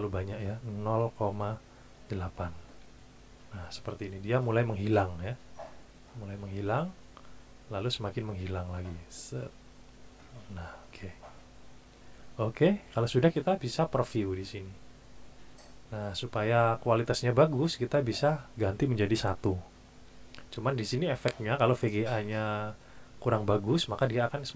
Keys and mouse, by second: 1.0 KP_0, 1.3 KP_Decimal, 2.1 KP_8, 2.9 KP_Enter, 8.0-10.8 drag, 12.2 click, 14.4 click, 16.0 click, 18.1 click, 19.5 KP_1, 19.9 KP_Enter.